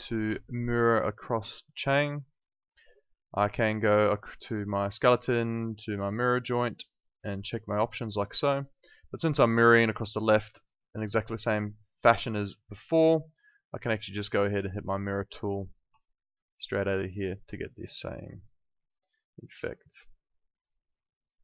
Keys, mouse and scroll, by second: 0.4 alt+middle click, 0.7 alt+right click, 1.0 alt+click, 4.8 click, 12.1 click, 15.9 click, 17.1 alt+click, 17.8 alt+right click, 18.1 alt+click, 19.6 alt+right click, 20.1 alt+click, 20.6 alt+right click, 21.0 alt+middle click, 21.3 alt+right click.